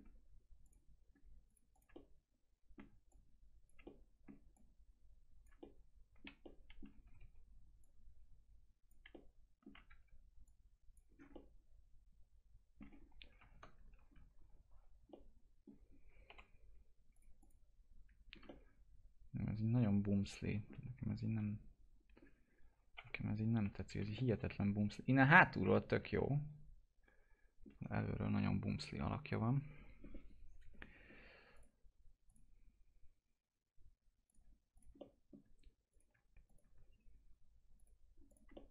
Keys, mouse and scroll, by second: 0.6 click, 1.4 click, 1.9 alt+middle click, 3.0 click, 3.8 alt+middle click, 4.5 click, 5.5 alt+middle click, 6.4 alt+middle click, 7.0 typing, 7.7-9.4 drag, 9.4 alt+middle click, 9.8 w, 10.4 click, 11.0 scroll down 1, 11.3-13.0 alt+middle drag, 13.0 scroll up 1, 13.3 ctrl+shift+z, 14.3 scroll up 1, 15.0 alt+middle click, 15.9-16.2 scroll up 1, 16.2 F4, 17.1 click, 17.6 scroll down 1, 18.4-21.3 alt+middle drag, 21.3 p, 22.1 scroll up 1, 22.9 F4, 23.8 scroll down 1, 24.1-28.6 alt+middle drag, 28.6 click, 31.0 scroll up 1, 31.5 click, 34.9 alt+middle click, 35.8 click, 37.7 click, 38.6 alt+middle click.